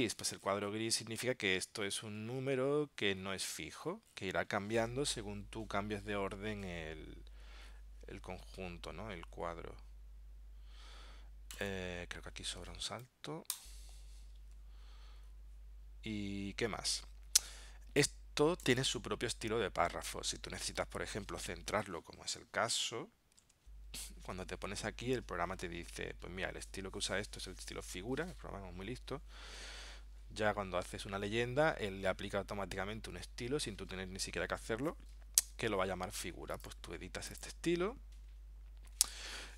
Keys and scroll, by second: 22.4 super+Tab, 23.5 super+Tab.